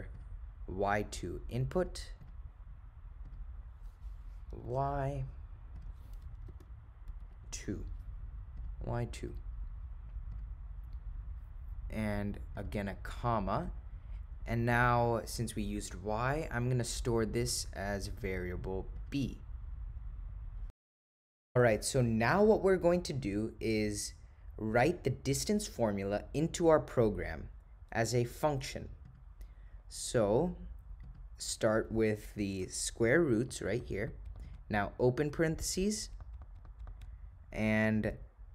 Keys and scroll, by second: 0.2 Return, 4.7 1, 5.8 0, 6.6 4, 7.2 -, 7.4 7, 8.6 ., 9.3 0, 13.6 ,, 15.5-16.2 typing, 34.5 (.